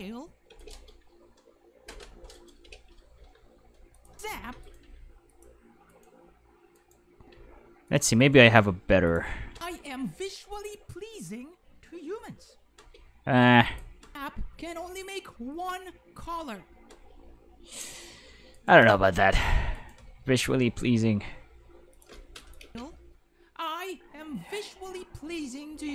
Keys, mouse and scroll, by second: 0.5 space, 0.6 right click, 1.9 k, 2.3 right click, 3.2 g, 3.9 click, 4.1 space, 4.5 space, 4.6 right click, 4.8 g, 5.3 click, 5.9 right click, 6.7 right click, 7.3 g, 7.9 drag, 8.2 right click, 8.4 g, 9.1 drag, 9.5 space, 12.7 space, 13.6 click, 14.0 space, 16.9 space, 18.5 right click, 18.7 g, 19.3 click, 19.7 right click, 19.9 g, 21.9 click, 22.4 click, 22.6 space, 22.9-25.9 middle drag.